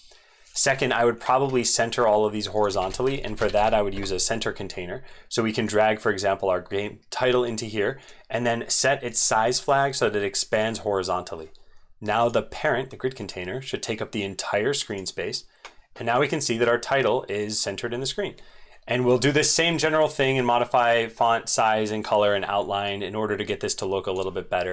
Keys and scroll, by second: 2.7 ctrl+a.